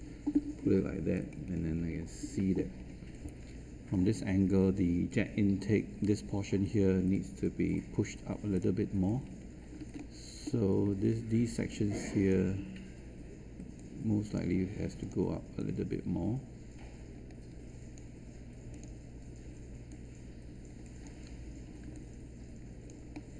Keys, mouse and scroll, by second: 1.1-1.5 scroll up 1, 8.5 click, 9.2-9.6 scroll up 1, 9.9 alt+middle click, 11.6-21.3 drag, 21.9 alt+click, 23.1 alt+middle click.